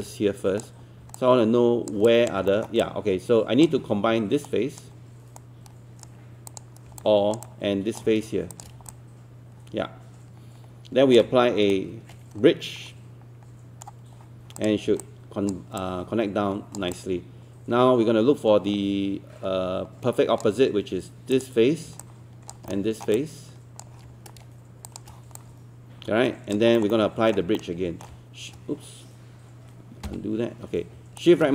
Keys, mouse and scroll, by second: 1.2 alt+click, 2.0 alt+click, 2.5 alt+middle click, 2.8 alt+click, 4.5 right click, 6.5 click, 7.0 alt+click, 8.5 shift+click, 8.9-11.2 alt+drag, 11.7-14.3 shift+right drag, 14.6 click, 15.0 alt+click, 17.0-20.4 alt+drag, 21.4 click, 22.0 alt+click, 22.7 alt+middle click, 23.2 alt+click, 24.9 shift+click, 25.4 alt+click, 26.8 alt+middle click, 27.3 alt+middle click, 30.1 z, 31.2-31.5 shift+right drag.